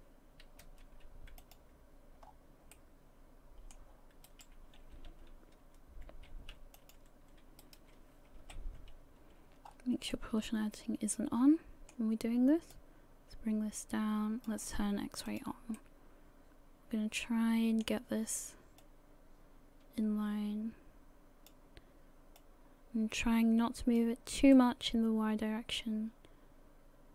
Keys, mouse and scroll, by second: 0.6 x, 2.2-2.7 scroll down 5, 2.7 middle click, 4.3 right click, 5.1 l, 6.0 x, 7.6 right click, 8.4 l, 9.7-10.1 scroll up 4, 10.1 middle click, 12.7 click, 14.5 click, 15.3 click, 15.8 middle click, 20.2 click, 22.4 click, 24.5 middle click.